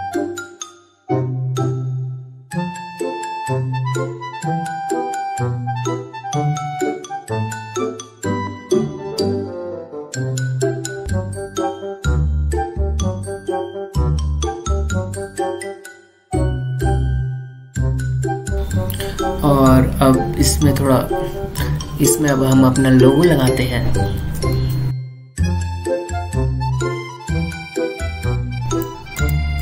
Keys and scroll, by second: 0.2 space, 2.4 ctrl+z, 8.5 ctrl+z, 10.6 ctrl+z, 11.5 ctrl+alt+z, 13.3 ctrl+z, 14.1 ctrl+z, 24.9 super+e, 26.5 Delete, 28.7 ctrl+t.